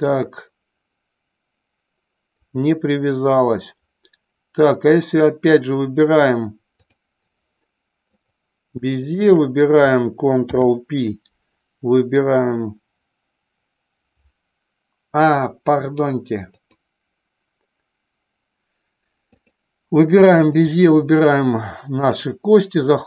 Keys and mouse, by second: 0.2-2.4 drag, 6.8-7.4 drag, 10.4 ctrl+p, 16.5 click, 19.1 click, 20.3 shift+click, 22.0-23.0 drag.